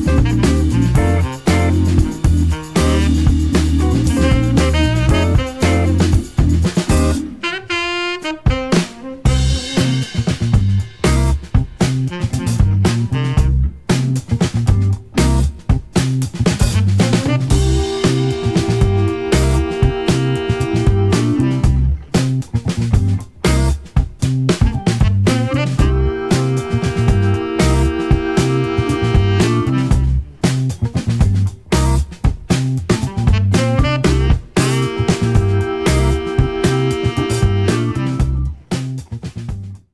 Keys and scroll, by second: 0.1 Left, 0.5 Left.